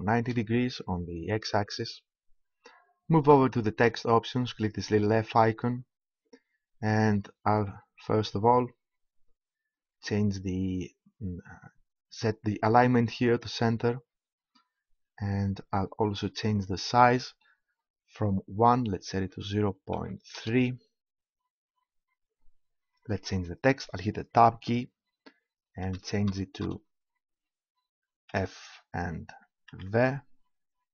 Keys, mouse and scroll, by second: 5.2-7.1 drag, 13.3-15.1 drag, 16.5-18.4 drag, 24.5 Tab, 25.7 BackSpace, 28.3 shift+f, 29.7 shift+v.